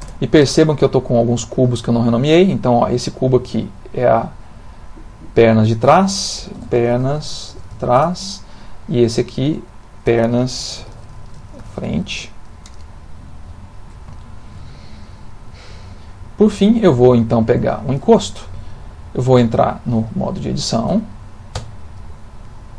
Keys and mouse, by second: 2.6 click, 5.3 click, 5.5 click, 9.0 click, 9.5 click, 9.7 click, 14.2 shift+middle click, 15.0 click, 16.0 middle click, 18.7 ctrl+middle click, 19.6 middle click, 21.6 Tab.